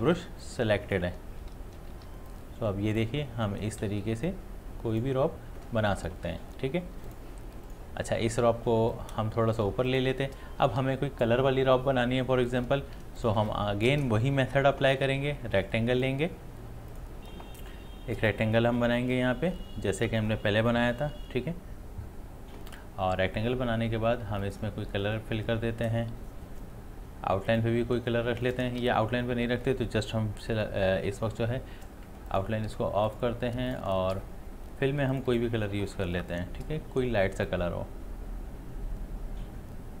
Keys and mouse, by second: 0.1 ctrl+z, 0.4-2.0 drag, 2.0 ctrl+z, 2.3 click, 3.9 ctrl+z, 4.3-9.9 drag, 13.0 click, 13.9 space, 15.6 click, 18.3-22.3 drag, 24.4-26.6 drag, 27.5 click, 29.0 ctrl+z, 32.3 click, 37.5-40.0 drag.